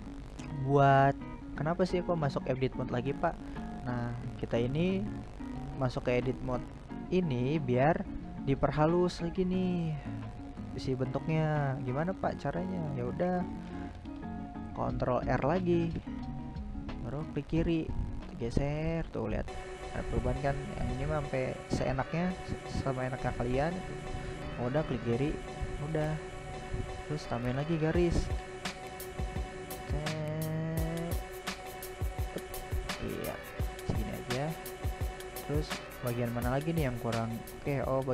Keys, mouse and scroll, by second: 0.0 middle click, 0.5-0.9 scroll up 2, 0.9-12.1 middle drag, 12.1 ctrl+r, 20.6-24.5 middle drag, 24.5 ctrl+r, 28.9-32.1 middle drag, 32.1-32.5 scroll down 1, 32.5-34.4 middle drag, 34.4-34.8 scroll down 2, 34.8-38.1 middle drag.